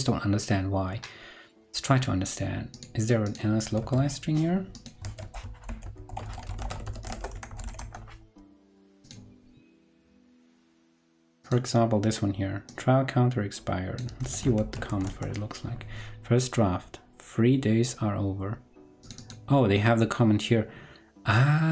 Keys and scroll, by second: 3.7 super+a, 5.0 super+a, 14.1 super+c, 14.5 shift+super+f, 14.8 super+v.